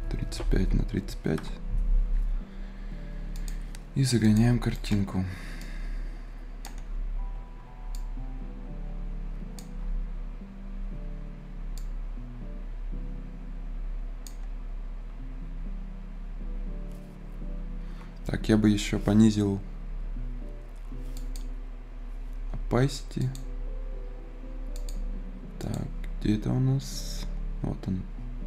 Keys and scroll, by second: 0.0-0.9 typing, 1.2 Return.